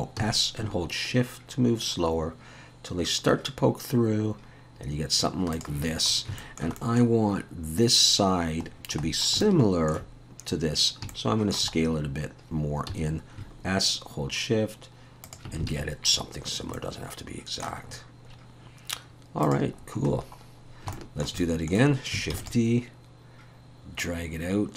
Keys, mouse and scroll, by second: 0.2 s, 6.1 scroll up 4, 6.4 shift+middle click, 6.8 middle click, 8.7-9.2 scroll down 5, 9.4 middle click, 11.1 shift+middle click, 11.8-12.9 scroll up 3, 12.9 s, 15.7 alt+a, 15.8-16.8 scroll down 4, 16.8 middle click, 17.9-18.8 scroll up 6, 19.5 click, 19.8-20.9 scroll down 9, 20.9 shift+middle click, 22.2 middle click, 22.4 shift+d, 24.0 click.